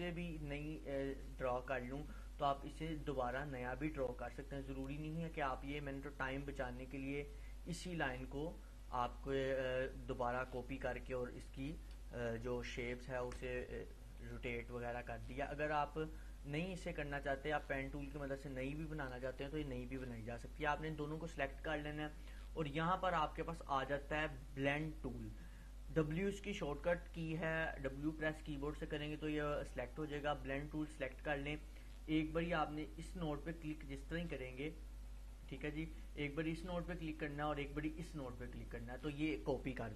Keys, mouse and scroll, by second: 0.7-1.6 drag, 10.3-13.6 drag, 30.5 click, 33.3 click.